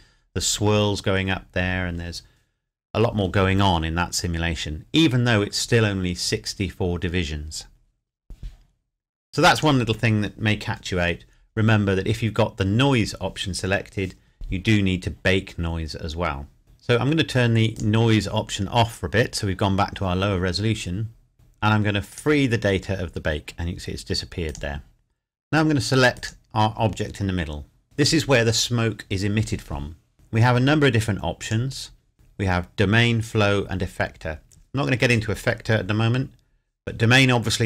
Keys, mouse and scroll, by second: 9.5 click, 15.5-16.6 scroll down 1, 17.7 click, 18.9-20.4 scroll up 1, 22.1 click, 24.4 click, 27.8-28.3 scroll down 1, 31.4 click.